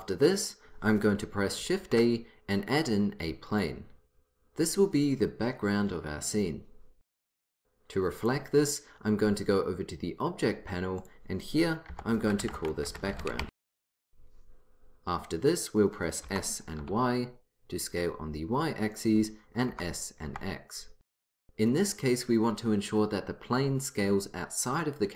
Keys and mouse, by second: 1.8 shift+a, 8.2-9.7 drag, 11.0-12.5 drag, 16.2 s, 19.7 s.